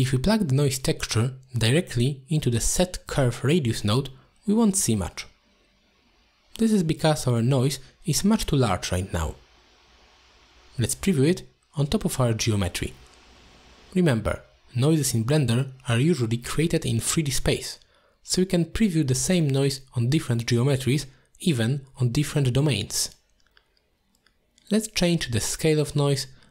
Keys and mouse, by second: 0.3-1.0 drag, 3.4 shift+middle drag, 3.9 shift+middle click, 4.8 middle drag, 5.9-6.5 middle drag, 7.3-7.7 middle drag, 8.3-8.8 shift+middle drag, 11.7 ctrl+shift+click, 13.7 middle drag, 14.5 ctrl+shift+click, 17.0-17.7 drag, 18.4 middle drag, 19.5-19.8 middle drag, 20.2-22.1 middle drag, 23.3 middle click, 24.4-26.5 drag.